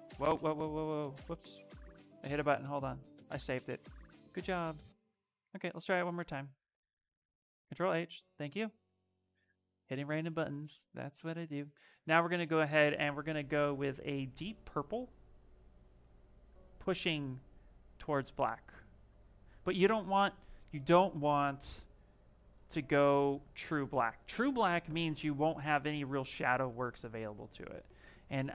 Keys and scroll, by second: 0.0 Escape, 0.4 Escape, 0.7 Escape, 1.0 Escape, 4.8 d, 5.2 d, 6.7 ctrl+h.